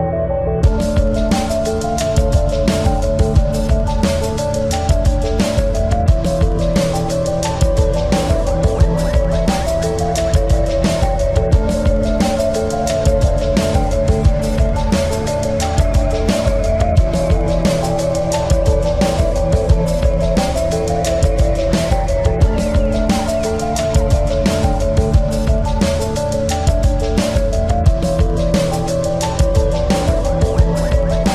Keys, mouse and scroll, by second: 1.1 click, 2.8-4.5 drag, 6.8 s, 8.8-9.8 drag, 10.3 middle click, 11.6 Tab, 14.5 e, 16.3 s, 19.7 middle click, 20.9 ctrl+z, 21.5 ctrl+z, 21.8 ctrl+z, 24.6 a, 24.9 a, 25.4 s, 26.8-28.6 drag, 28.2 KP_1.